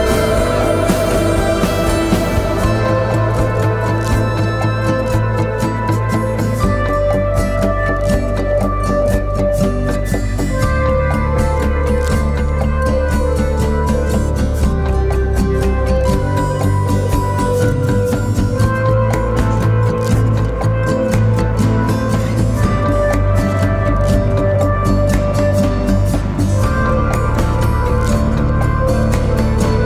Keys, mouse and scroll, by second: 4.0 Left, 4.2 Left, 4.6 Left, 6.4 Left, 6.6 Left, 6.8 Left, 15.2 double click, 20.0 ctrl+Return, 28.2 alt+click, 29.6 alt+i.